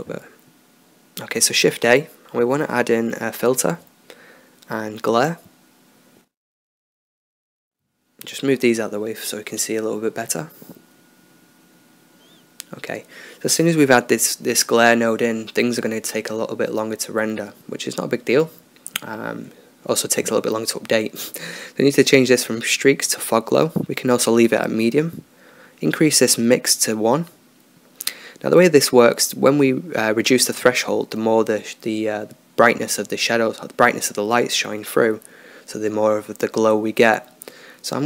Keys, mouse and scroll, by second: 6.7-8.3 drag, 8.6-9.2 drag, 10.3 n, 12.0 n, 13.8 click, 15.3-15.7 middle drag, 18.5-19.0 middle drag.